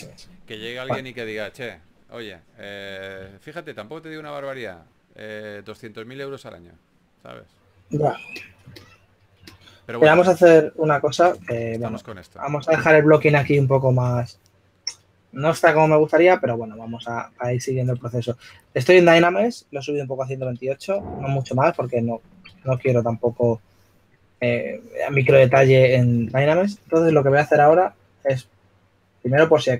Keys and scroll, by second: 0.0-1.0 typing, 3.4-4.3 typing, 9.3-10.4 typing, 11.4 super+z, 13.5-14.3 typing, 21.1 s, 22.6 super+z.